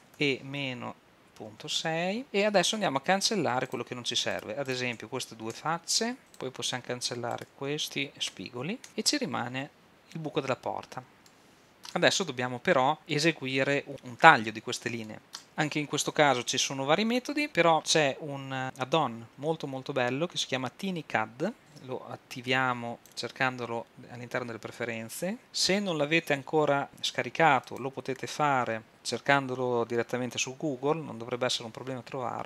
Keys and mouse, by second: 0.2 e, 4.4-5.4 middle drag, 5.6 x, 6.2 middle click, 7.4 middle click, 10.0 middle click, 11.4-20.7 drag, 21.8 super+,.